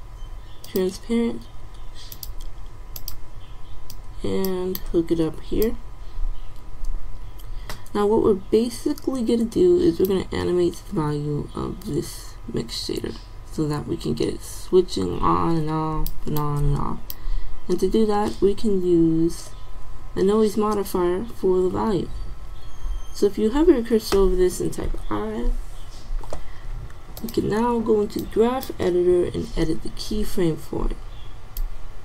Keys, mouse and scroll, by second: 4.0-6.5 drag, 10.1-11.9 drag, 16.5-18.2 drag, 19.0-25.0 middle drag, 25.0 i, 27.4-28.3 drag.